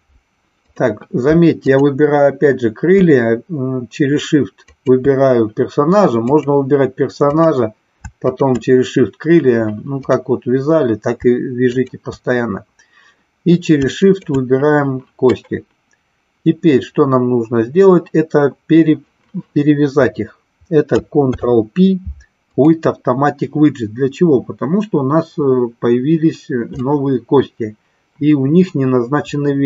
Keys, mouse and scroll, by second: 0.6 click, 1.6 click, 4.6 shift+click, 6.1 click, 7.3 click, 8.3 shift+click, 11.5 shift+click, 13.9 shift+click, 21.3 ctrl+p, 26.8-27.3 middle drag, 27.4 middle click, 28.5-29.6 middle drag.